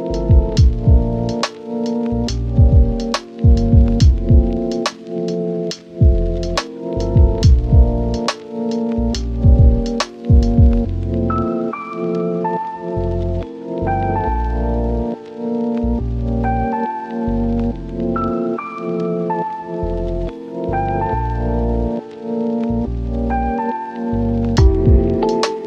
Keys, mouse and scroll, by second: 0.1 click, 0.4 scroll down 1, 0.6-0.9 scroll up 1, 0.9 Tab, 1.1 scroll down 1, 1.2-2.0 scroll up 1, 2.0 scroll down 1, 2.1-2.5 scroll up 2, 2.1 Tab, 2.8 ctrl+shift+click, 3.1 scroll up 1, 4.2 Tab, 6.0 click, 8.1 scroll down 1, 8.2 Tab, 8.5 right click, 9.2-9.6 scroll up 1, 9.9 Tab, 10.2 scroll down 1, 10.3 scroll up 1, 10.5 ctrl+shift+click, 11.6 Tab, 11.9-12.4 scroll down 1, 12.4 right click, 13.3-14.4 scroll up 2, 13.5 Tab, 14.4 click, 15.2 ctrl+shift+click, 15.8 scroll down 1, 16.0-16.7 scroll up 1, 16.7 BackSpace, 17.7 Return, 19.9 Escape, 20.9 typing, 21.7 Return, 23.2-24.8 typing, 23.3 Return, 24.1 Return, 25.1 Return.